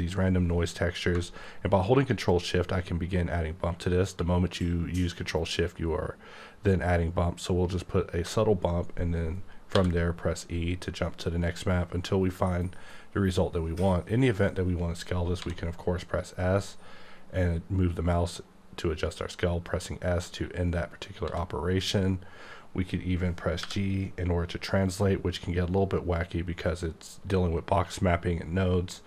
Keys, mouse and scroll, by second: 1.1 shift+Num_Lock, 9.7 e, 15.4 s, 21.3 s, 23.6 g.